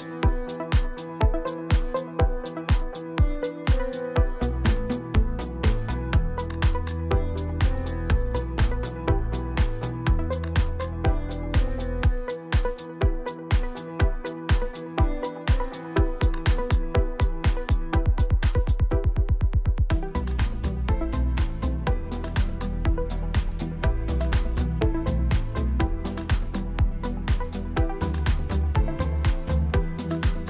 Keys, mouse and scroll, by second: 0.2 click, 1.2 click, 3.2 click, 3.9 click, 6.4 ctrl+z, 7.7 click, 8.7 click, 9.4 click, 11.1 click, 12.2-12.8 ctrl+scroll up 2, 13.7 click, 15.9 click, 17.2-19.5 drag, 19.8 shift+click, 21.3 click, 21.8 click, 22.7 click, 23.9 click, 24.8 click, 26.1 click, 27.0 ctrl+scroll down 2, 27.2 ctrl+click, 27.2 scroll up 2, 27.9 click, 28.1 shift+click, 28.3 ctrl+shift+middle click, 28.5 shift+click, 28.8 click, 29.0-29.4 ctrl+scroll down 4, 29.1 ctrl+click, 29.5 ctrl+click, 29.7 click, 30.0 ctrl+click, 30.2 shift+click.